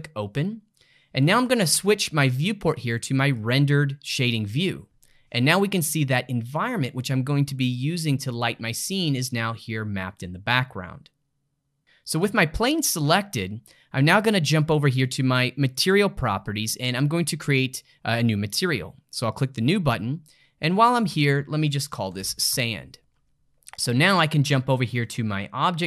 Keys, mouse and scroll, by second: 3.7 click, 5.5-8.6 middle drag, 12.2 click, 15.7 click, 19.3 click, 20.7 click, 20.9-23.9 drag, 24.7-25.8 drag.